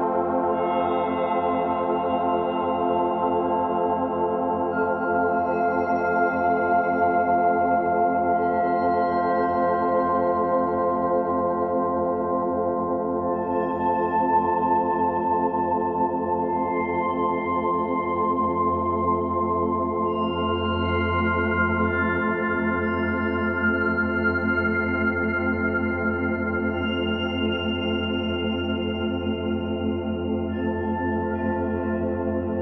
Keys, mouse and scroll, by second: 3.4-4.0 scroll up 3, 4.0 shift+middle click, 5.1 alt+middle click, 5.6 shift+middle click, 5.8-6.2 scroll up 4, 6.2-7.0 shift+middle drag, 7.0 click, 7.3 Tab, 7.8 shift+middle click, 8.5 Tab, 8.6 click, 8.7 Tab, 10.1-12.3 shift+middle drag, 12.1 scroll up 3, 13.4 ctrl+r, 14.3 3, 14.7 click, 14.9 alt+shift+click, 15.1 alt+shift+click, 15.5 middle click, 16.0-17.9 scroll down 3, 17.9 e, 18.8 s, 20.7 s, 21.4 g, 23.5 ctrl+KP_Add, 23.8 ctrl+KP_Add, 24.3 ctrl+z, 25.5-28.0 drag, 28.1 click, 28.4-29.0 scroll down 11, 28.6 Tab, 29.0 click, 29.2 b, 29.6 o.